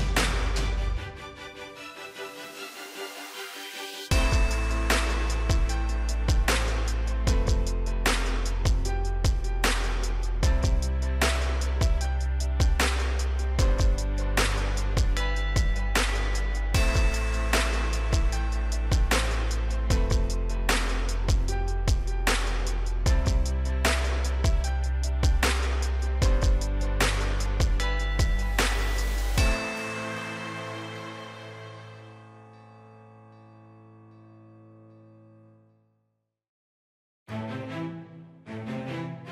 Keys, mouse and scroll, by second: 4.9 typing, 5.9 Return, 7.1-12.6 drag, 14.2 right click, 15.2 click, 16.0 right click, 24.4-27.2 scroll down 1, 27.4 click.